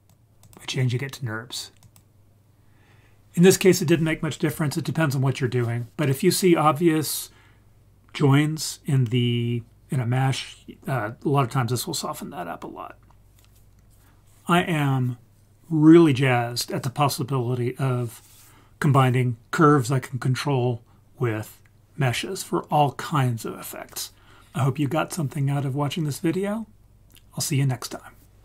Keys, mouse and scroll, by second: 0.4-2.0 drag.